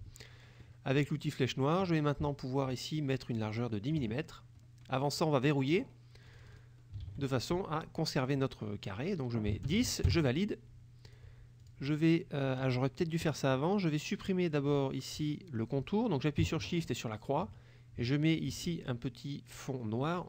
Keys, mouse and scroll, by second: 1.1 click, 3.4 click, 5.8 click, 6.4 click, 7.1 ctrl+a, 9.6 KP_1, 9.7 KP_0, 10.2 KP_Enter, 11.2 click, 11.7 click, 17.0 shift+click.